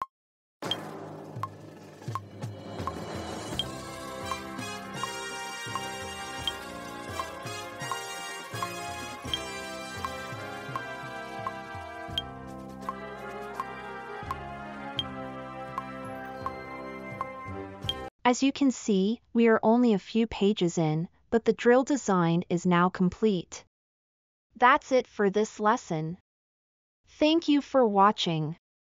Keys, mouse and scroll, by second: 13.9-16.9 drag, 13.9-16.9 right drag.